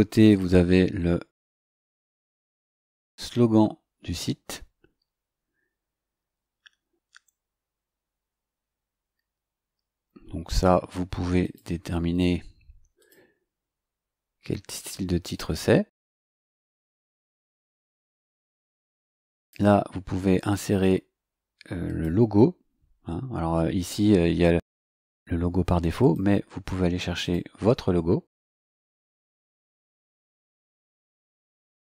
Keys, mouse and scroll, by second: 0.2 click, 2.2 click, 11.4 click, 13.0 click, 17.2 click, 19.3 click, 21.8 click, 26.0 click, 27.2 click, 29.6 click, 31.5 click.